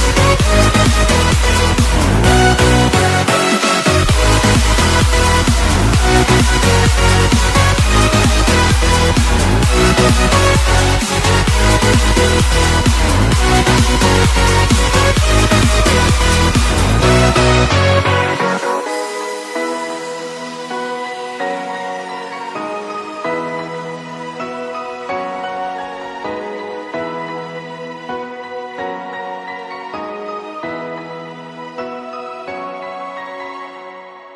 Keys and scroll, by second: 21.2 Delete.